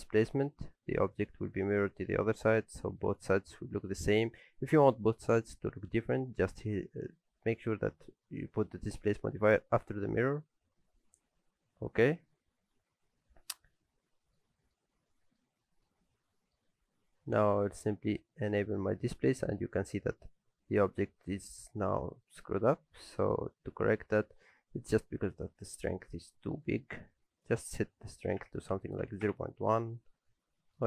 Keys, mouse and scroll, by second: 10.7-11.8 scroll up 5, 11.8-12.3 scroll down 1, 12.3 scroll up 2, 12.6-13.1 scroll down 6, 13.0 scroll up 1, 13.7-14.2 scroll up 2, 14.1 middle click, 14.5 shift+middle click, 14.9-15.4 scroll up 2, 15.1 middle click, 15.6 shift+middle click, 16.4 middle click, 18.5 click, 19.0-19.9 scroll down 8, 19.9 middle click, 20.3-20.9 scroll up 3, 20.8 middle click, 21.2 middle click, 21.6 shift+middle click, 22.0 scroll down 1, 22.3 middle click, 22.5-23.2 scroll up 2, 23.2 shift+middle click, 23.5 middle click, 23.9 shift+middle click, 26.4 click, 30.1-30.8 scroll up 4, 30.6 shift+middle click.